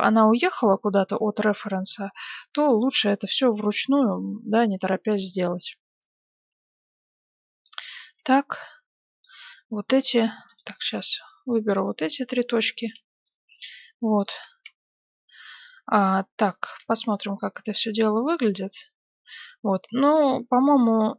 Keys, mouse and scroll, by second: 3.6 a, 3.7 b, 6.0-7.7 drag, 8.0 a, 8.1 b, 10.1 b, 10.7 a, 10.8 b, 11.7-13.4 drag, 13.8 click, 14.2 middle click, 15.0 a, 16.6 z, 17.2 middle click, 18.1-19.3 middle drag.